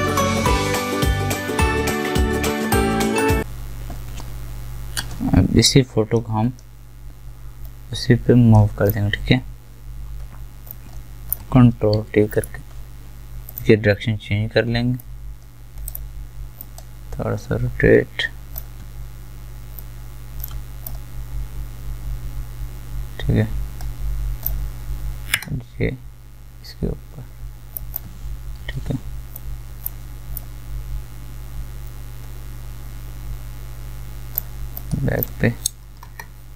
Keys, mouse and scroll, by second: 0.0 alt+right click, 0.1 click, 0.4 alt+right click, 0.5 alt+click, 1.0 alt+scroll up 1, 1.4 alt+right click, 1.8 alt+scroll down 1, 2.5-12.0 drag, 12.0 ctrl+t, 12.3 right click, 13.5-27.7 drag.